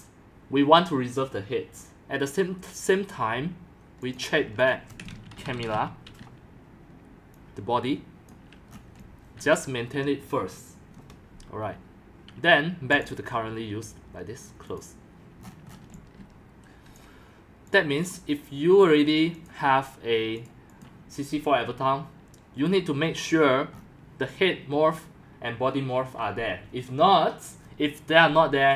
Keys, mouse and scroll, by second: 0.0-28.7 typing, 0.0-3.3 drag, 4.7 click, 8.3 click, 8.7 scroll down 5, 9.6 click, 11.1-15.4 drag, 15.4 scroll up 1, 15.5-16.0 scroll, 17.0 click, 19.4 click, 20.4 click, 21.2 click, 22.9 drag, 23.2 click, 23.7-28.7 middle drag, 23.7-24.1 scroll.